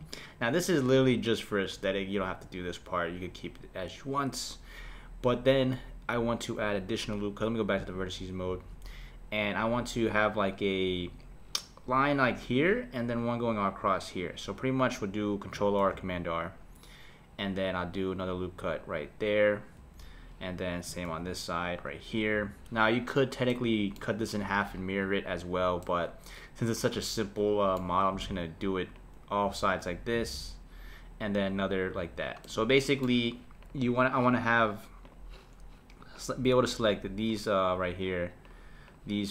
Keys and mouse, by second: 7.8-10.8 drag, 15.8 r, 21.0 r, 23.5-28.1 middle drag, 28.3 r, 30.2 r, 32.4-33.6 middle drag, 33.6 click, 35.0-36.2 drag, 36.7 shift+click, 37.3 shift+click, 37.8-39.0 shift+drag.